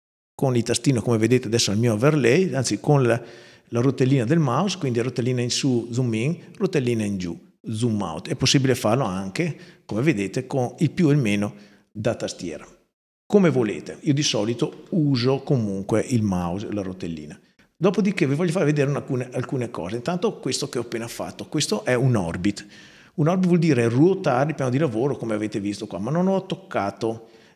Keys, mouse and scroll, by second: 0.5-1.6 scroll down 2, 1.6-1.9 scroll down 1, 3.6-3.9 scroll up 2, 6.0-6.9 scroll down 2, 6.9-8.0 scroll down 1, 8.9 KP_Subtract, 10.0 KP_Add, 14.0 middle click, 14.9 scroll down 2, 15.1 middle click, 15.9 scroll down 2, 18.3-19.7 right drag.